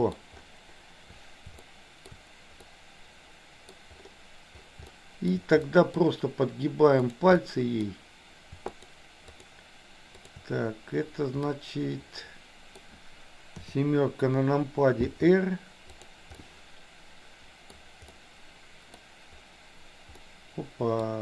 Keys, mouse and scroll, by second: 1.6 shift+middle click, 2.6 scroll up 1, 2.9 middle click, 4.9 shift+middle click, 5.6 scroll up 1, 5.8 middle click, 7.4 middle click, 8.7 shift+click, 9.2 shift+click, 10.1 shift+click, 11.4-12.7 middle drag, 13.7 KP_7, 15.1 r, 16.5-17.8 middle drag, 18.3 middle click, 20.1-21.1 middle drag.